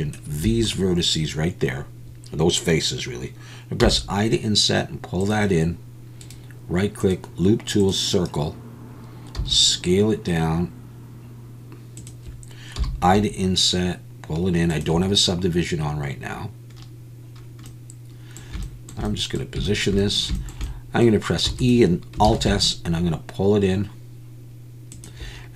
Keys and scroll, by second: 0.4 Escape, 9.4 s, 21.5 e, 22.3 alt+s.